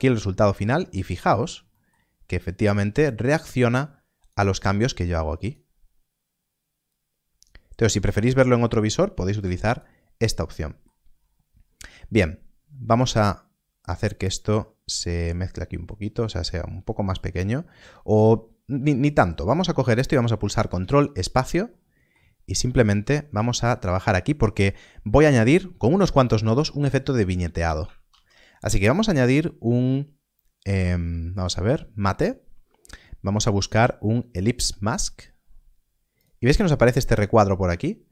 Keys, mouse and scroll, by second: 0.3 middle click, 0.8-1.7 scroll up 1, 1.7 middle click, 1.9-2.6 scroll down 1, 2.6 click, 10.5 middle click, 11.1-13.6 scroll down 1, 17.1 click, 19.1-19.9 scroll down 1, 21.6 ctrl+space, 21.7 middle click, 22.4 scroll up 1, 23.8 middle click, 27.8 middle click, 28.0 shift+a, 34.8 shift+a.